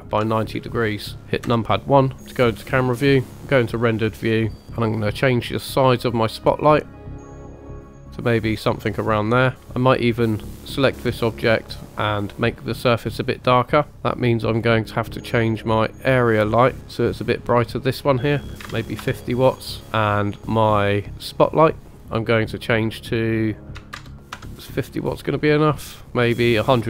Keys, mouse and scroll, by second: 1.4 KP_0, 3.6 click, 6.0-8.5 drag, 9.8 click, 14.6-15.1 scroll down 2, 15.6-16.8 scroll up 2, 16.8 click, 17.9-19.0 drag, 20.1 scroll down 1, 20.6 scroll down 2, 21.6 click, 22.6-24.5 drag, 26.4-26.8 drag.